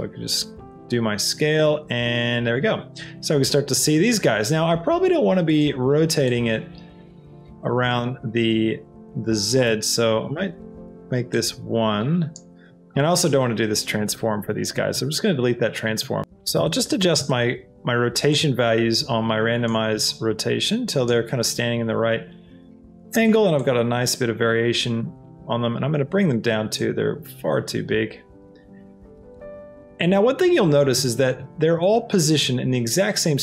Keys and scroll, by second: 9.7 KP_0, 10.4 Return, 12.5 ctrl+z.